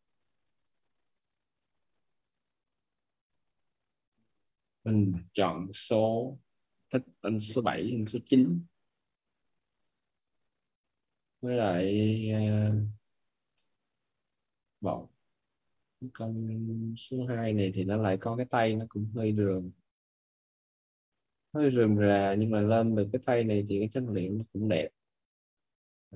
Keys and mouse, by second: 2.0 click, 13.5 middle click, 24.2 middle click.